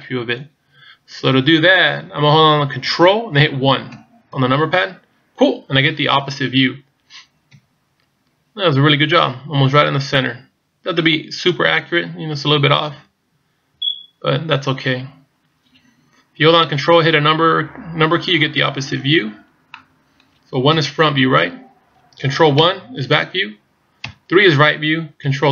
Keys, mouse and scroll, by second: 3.9 ctrl+KP_1, 6.1-6.9 scroll up 3, 7.5 KP_Decimal, 10.3 click, 12.9 z, 13.7 z, 14.7-16.0 scroll down 3, 16.8 scroll down 2, 18.3-19.7 scroll down 5, 19.7 middle click, 20.6 KP_1, 21.4-22.3 scroll down 3, 22.5 ctrl+KP_1, 24.1 KP_3.